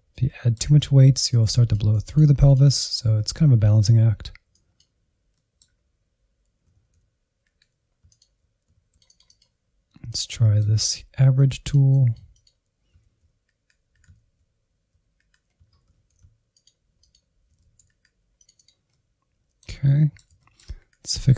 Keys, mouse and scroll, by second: 0.2-1.3 shift+middle drag, 1.3-2.6 drag, 2.6-3.1 scroll down 3, 3.1-4.5 middle drag, 4.5 click, 5.3 middle click, 6.2 alt+z, 6.5 Insert, 7.0 ctrl+Left, 7.2 alt+z, 7.8 click, 8.0 Insert, 8.3-10.3 drag, 10.3 middle click, 11.3-13.1 drag, 13.1 ctrl+z, 13.4 Insert, 13.5 Insert, 13.6 ctrl+z, 13.8 Insert, 14.1 ctrl+click, 14.3 alt+z, 14.5-16.0 drag, 16.0 scroll down 2, 16.2 alt+z, 16.3 Insert, 16.6 Insert, 16.7 scroll up 2, 16.9 click, 17.2 ctrl+z, 17.3-18.7 drag, 18.7 middle click, 19.1 scroll down 2, 19.2 shift+middle click, 19.7 Insert, 19.8 middle click, 20.1 scroll up 1, 21.1-21.3 drag.